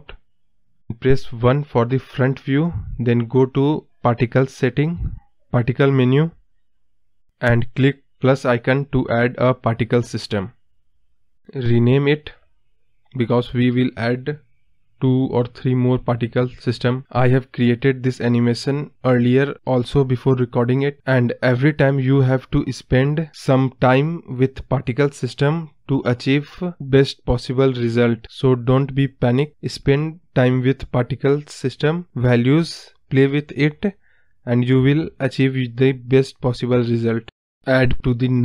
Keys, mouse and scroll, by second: 0.0 click, 0.3-1.2 scroll down 1, 1.2-4.3 drag, 4.3 scroll down 2, 4.6-5.7 middle drag, 5.7 KP_1, 6.2-7.3 scroll up 1, 7.3 click, 9.7-10.1 drag, 13.6-16.2 drag.